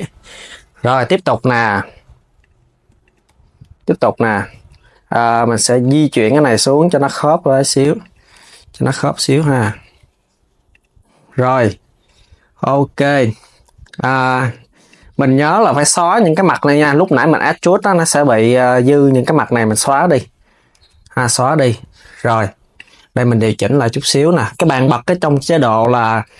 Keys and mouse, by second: 0.5 click, 1.0 Tab, 2.1 click, 2.7 shift+click, 3.0 KP_3, 4.8 click, 5.5 click, 5.9 KP_3, 6.5 g, 8.0 z, 14.5 click, 15.1 shift+click, 15.8 shift+click, 16.3 shift+click, 17.2 x, 19.5 KP_3, 22.4-25.4 drag.